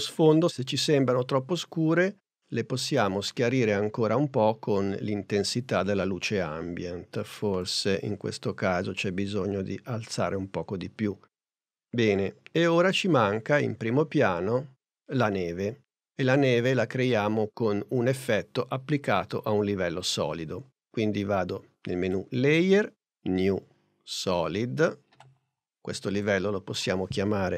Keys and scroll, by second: 27.4-27.5 typing.